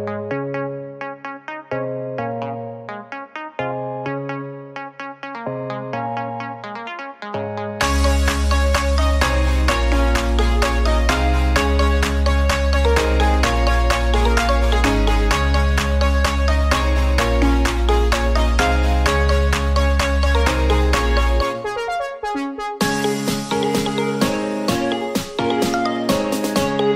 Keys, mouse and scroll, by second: 0.5 click, 1.6-3.0 drag, 3.0 click, 3.9 n, 4.6-5.0 middle drag, 5.0 scroll up 4, 5.7-12.8 middle drag, 12.6 scroll down 6, 12.8 middle click, 13.3 click, 16.3 click, 18.0-19.0 middle drag, 19.0 drag, 20.3 x, 21.2 shift+a, 23.7 drag, 25.6 s.